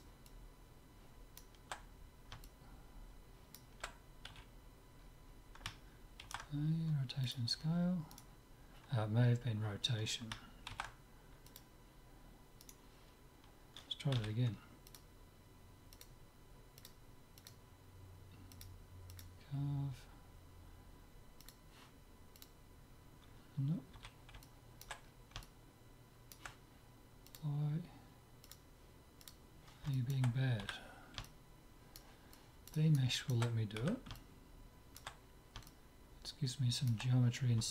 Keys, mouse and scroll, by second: 2.5-4.5 middle drag, 4.5 z, 5.0-6.5 middle drag, 6.2 ctrl+a, 8.2-10.1 drag, 10.7 ctrl+a, 12.7-14.4 right drag, 14.2 z, 15.0-16.7 drag, 16.9-18.5 drag, 18.6-20.3 drag, 21.5-23.2 drag, 24.0 z, 24.5 middle click, 27.3-30.4 drag, 30.0 right click, 30.7 z, 31.5-33.8 middle drag, 33.8 z, 36.0-37.3 middle drag.